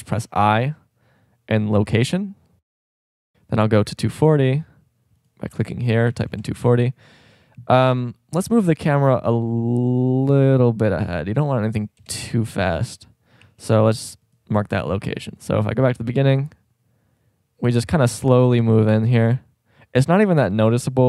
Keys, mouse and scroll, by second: 0.1 i, 12.1 KP_0, 13.4 i.